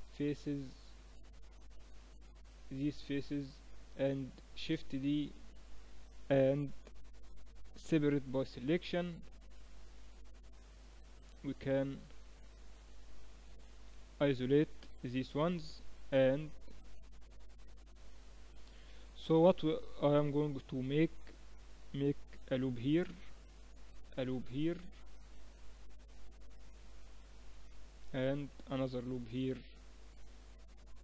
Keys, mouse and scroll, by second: 0.2 a, 0.6-2.7 middle drag, 4.2 shift+d, 4.7-7.3 middle drag, 7.3 p, 9.0 Tab, 9.6-14.4 right drag, 13.6 KP_Divide, 15.8 Tab, 19.6 ctrl+r, 23.6 ctrl+r, 28.8 ctrl+r.